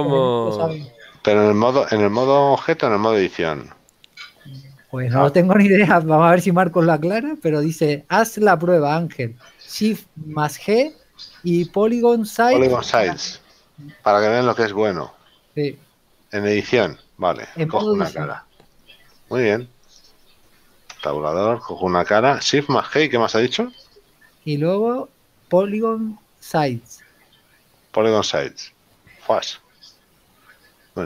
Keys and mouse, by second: 7.0 click, 19.3 click, 20.0 right click, 21.1 Tab, 28.8 click.